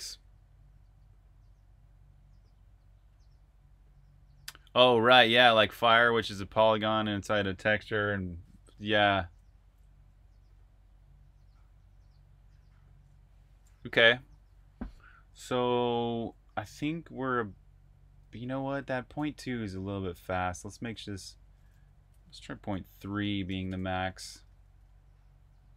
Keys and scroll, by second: 14.9-16.2 typing, 17.8-21.1 typing, 22.4-25.4 typing.